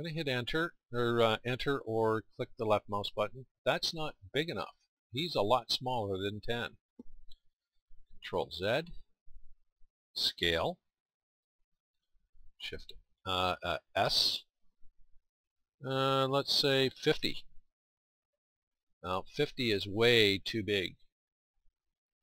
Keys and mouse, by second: 0.2-1.8 drag, 2.2-6.3 drag, 8.2 ctrl+z, 14.0 s, 16.9 s.